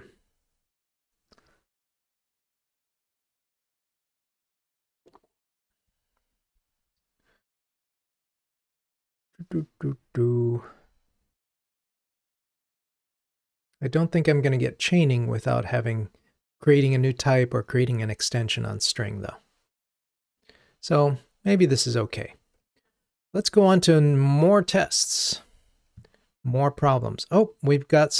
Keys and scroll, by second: 23.3 ctrl+Tab.